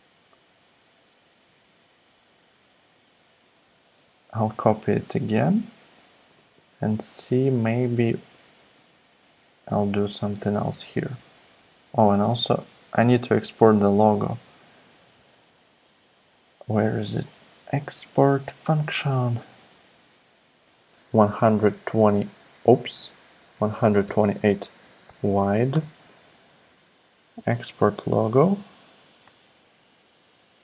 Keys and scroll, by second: 21.5-25.1 typing, 25.7 Return.